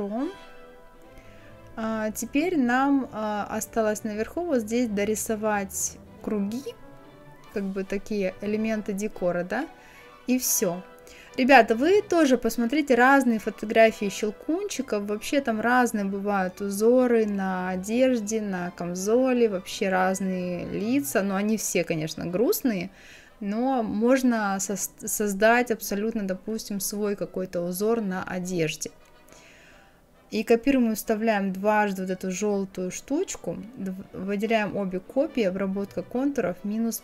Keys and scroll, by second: 11.1 ctrl+d, 12.6 ctrl+d, 13.4 ctrl+d, 23.0 Right, 26.2 KP_6, 28.6 ctrl+c, 28.9 ctrl+f, 29.2 ctrl+c, 29.5 ctrl+f, 30.0 Down.